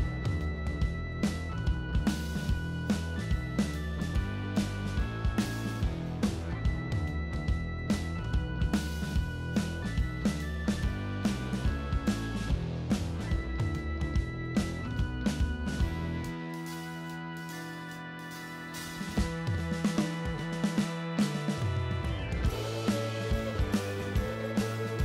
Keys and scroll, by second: 4.8 s, 6.3-8.1 typing, 10.4 shift+d, 13.4-14.2 typing, 17.1 ctrl+z, 24.6 ctrl+z.